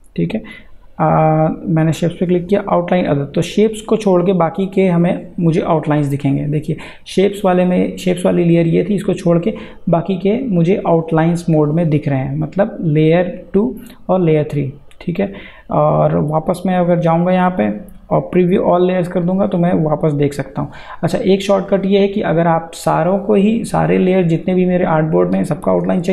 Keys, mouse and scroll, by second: 0.1 click, 16.5 click.